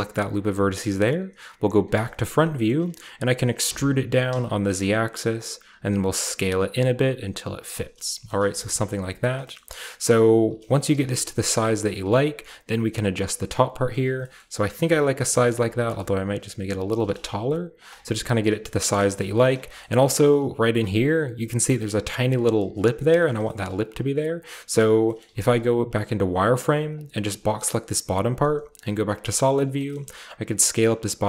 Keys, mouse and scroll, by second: 1.9 KP_1, 2.5-4.2 shift+middle drag, 3.6 e, 4.2 z, 5.3 click, 5.6 s, 7.6 click, 7.8-8.6 scroll down 1, 8.0 shift+middle click, 8.5 middle click, 8.6-9.3 scroll up 1, 8.7-10.6 middle drag, 9.3 typing, 9.5-10.3 scroll up 1, 10.3 scroll up 1, 10.3-12.0 typing, 10.9 click, 11.5-13.2 drag, 13.2-14.5 scroll down 1, 13.4 middle click, 13.9 middle click, 14.3-16.7 shift+middle drag, 14.5-15.2 shift+scroll up 1, 14.6-17.9 typing, 17.9-18.6 scroll down 1, 18.6-19.3 scroll up 1, 19.8-20.2 scroll up 2, 20.7 typing, 20.9 shift+middle click, 20.9-21.5 shift+scroll up 1, 21.5-23.0 scroll up 1, 23.0-25.0 scroll down 1, 23.1-25.2 shift+middle drag, 25.2-26.6 scroll down 1, 25.2 typing, 26.9 click, 28.5-30.4 typing, 29.3-31.2 scroll up 1, 29.5-31.2 shift+middle drag.